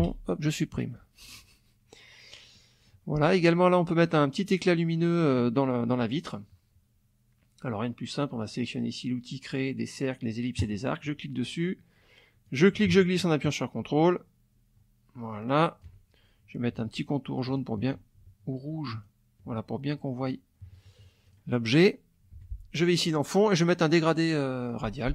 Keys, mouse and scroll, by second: 0.0 Delete, 0.9 click, 2.5 click, 10.6 click, 12.4-16.0 ctrl+drag, 17.5 shift+click, 18.9 shift+click, 20.2 middle click, 21.3 click, 22.4 F1, 23.0 click, 24.0 click.